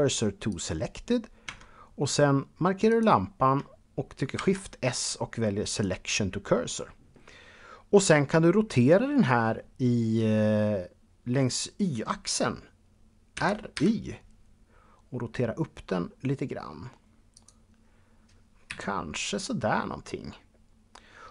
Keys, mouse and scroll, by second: 0.3 click, 1.3 Tab, 2.7 click, 4.2 shift+s, 5.5 click, 11.3-12.9 scroll down 1, 13.6 y, 17.2 click, 18.5 KP_1.